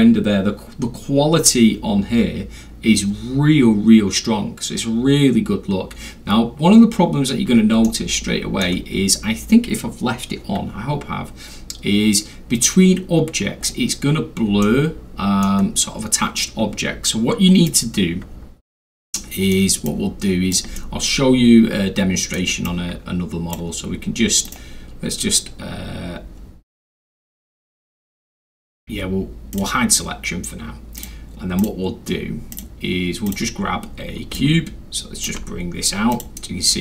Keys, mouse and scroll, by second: 7.0 middle click, 7.1 scroll, 7.8 alt+scroll, 7.9-8.6 alt+middle drag, 10.9 middle click, 10.9 scroll, 11.6 scroll up 2, 11.7 scroll, 13.6 scroll down 2, 13.8 scroll, 14.1 scroll down 2, 14.2-14.6 scroll, 14.6-15.4 middle drag, 17.7 click, 18.0-18.4 scroll down 1, 18.3 scroll, 18.4-18.8 scroll down 1, 19.2-19.5 middle drag, 19.7 click, 20.8-22.4 alt+middle drag, 22.6 alt+click, 24.5 right click, 29.5 click, 31.0 click, 31.6 click, 32.5 click, 33.3 click, 34.4 ctrl+click, 36.1 ctrl+click.